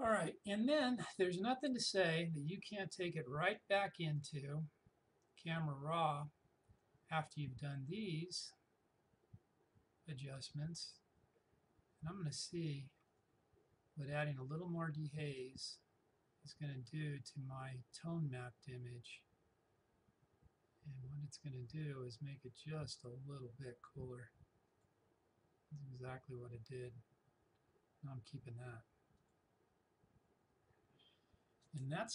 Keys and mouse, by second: 1.1-4.2 drag, 4.2 click, 6.8-11.0 drag, 13.1-25.4 drag, 29.2 click.